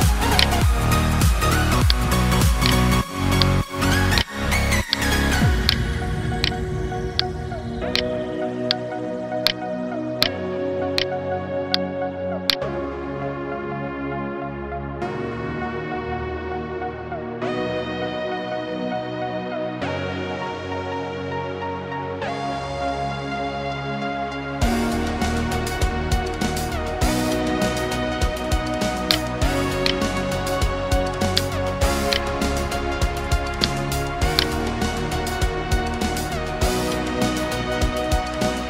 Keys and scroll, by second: 8.1 space, 8.9 space, 9.9 space, 27.8 space.